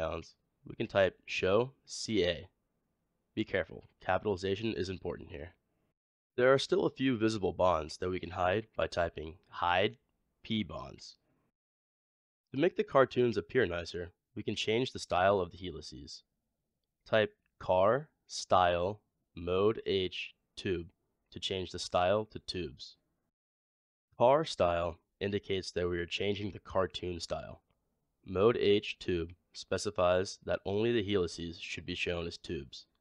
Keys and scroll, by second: 1.1 typing, 9.7 typing, 17.5-18.4 typing.